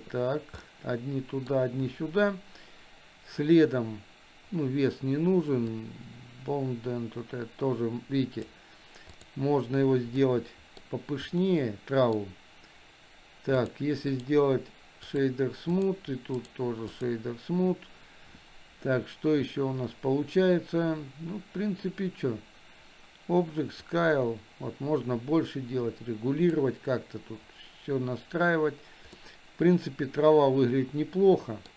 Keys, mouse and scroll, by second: 0.7-1.6 middle drag, 5.9-8.6 drag, 10.3 middle click, 11.5-12.1 middle drag, 14.1-15.4 right drag, 15.8 click, 16.4 right click, 23.8-26.6 drag, 29.2-31.7 middle drag.